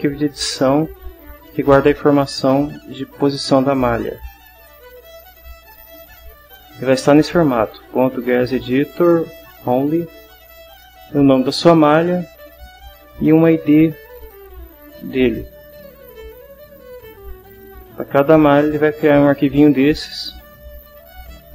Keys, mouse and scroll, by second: 3.1 click, 4.9 click, 14.1 click, 16.7-17.9 drag.